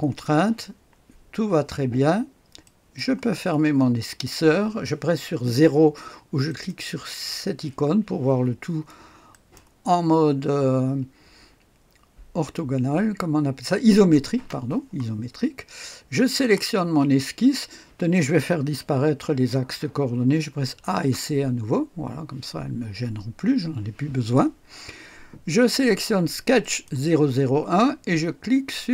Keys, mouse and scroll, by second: 2.6 click, 6.4 click, 9.3 click, 10.2 click, 14.3 space, 16.2 click, 20.6-21.5 typing, 26.6 click.